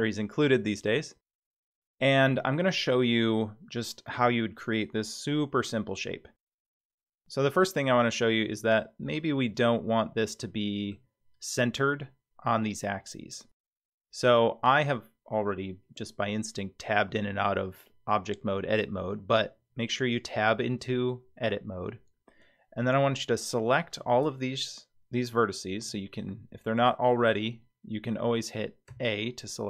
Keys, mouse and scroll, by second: 6.6-10.9 middle drag, 13.6 Tab, 16.9 Tab, 20.6-24.0 middle drag, 25.7 a, 28.0 alt+a, 28.9 a.